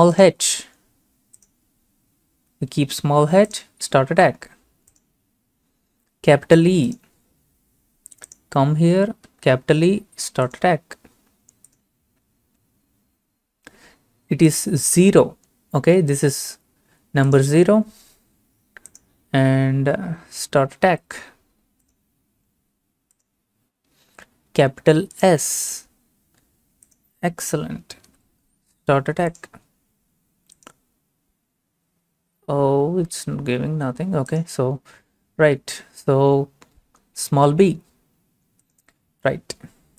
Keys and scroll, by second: 2.4 h, 9.3 e, 20.2 0, 28.1 s.